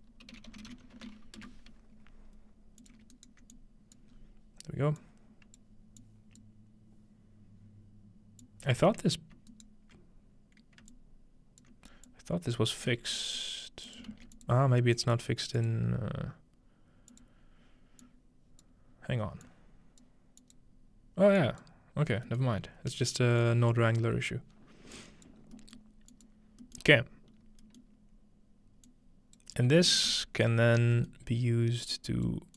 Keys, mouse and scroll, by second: 0.0-1.6 typing, 2.8 click, 3.6 alt+click, 4.2-5.6 scroll up 1, 5.1 click, 6.0 click, 8.4 click, 9.5 alt+drag, 9.5 alt+middle drag, 10.9 alt+click, 12.1-12.9 alt+drag, 13.1 click, 13.9 click, 14.1 shift+d, 14.4 click, 15.2-17.1 shift+drag, 17.2 click, 20.0-20.4 drag, 20.6-21.4 drag, 21.6 click, 21.9-22.7 scroll down 1, 22.3-24.9 middle drag, 22.7 scroll up 2, 22.8-23.8 scroll down 2, 23.4 click, 23.8-24.9 scroll up 1, 25.4-27.5 drag, 25.4-26.7 scroll down 2, 27.4-28.9 scroll up 2, 28.9 click, 30.8-31.9 scroll up 2, 31.9 click.